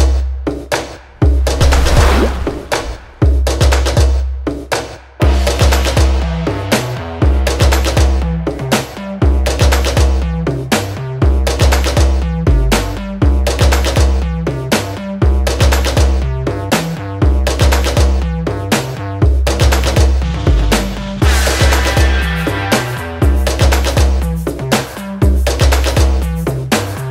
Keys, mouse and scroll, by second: 6.2 click, 9.9-16.9 drag, 16.9 right click, 19.6 click, 22.3-24.2 drag.